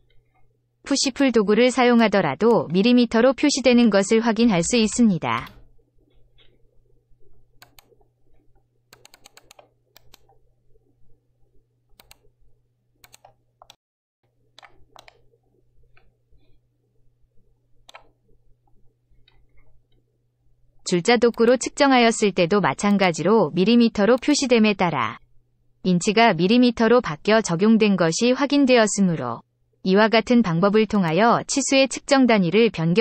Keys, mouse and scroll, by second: 1.0 click, 1.9 click, 3.6 2, 4.3 0, 4.6 0, 4.7 0, 5.3 Return, 7.6 click, 8.9 click, 9.1 click, 9.3 click, 11.9 click, 13.0 click, 13.6 middle click, 14.9-17.8 middle drag, 17.9 scroll up 1, 21.3 click, 22.8 click, 24.1 click, 30.9 click.